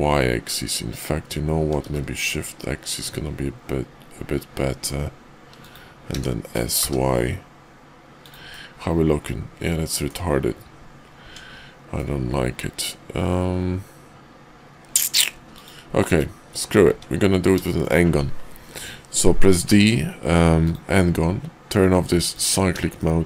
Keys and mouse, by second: 6.0 s, 8.5 click, 9.1 middle click, 11.2 Tab, 11.9-15.2 middle drag, 15.3 x, 16.1 `, 16.9 `, 17.6 shift+drag, 19.5 d, 22.3 click, 23.0-23.2 shift+drag.